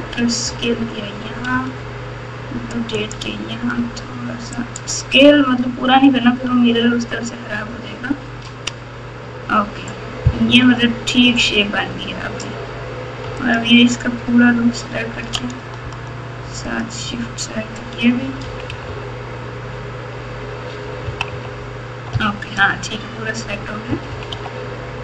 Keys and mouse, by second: 1.5 r, 3.7 s, 7.7 ctrl+KP_6, 8.2 ctrl+KP_6, 10.4 KP_8, 16.7 shift+click, 18.4 KP_2, 18.6 KP_2, 18.8 KP_2, 21.0 KP_2, 21.3 KP_2, 22.1-22.8 KP_8, 23.8 KP_2, 24.1 KP_2, 24.2 KP_2.